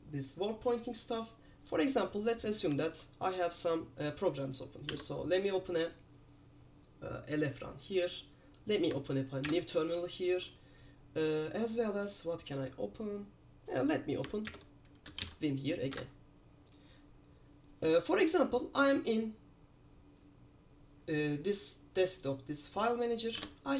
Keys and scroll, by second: 3.1 super+3, 5.1 super+r, 9.6 super+Return, 14.6 super+Return, 14.9-15.8 typing, 16.0 Return, 23.5 alt+Tab.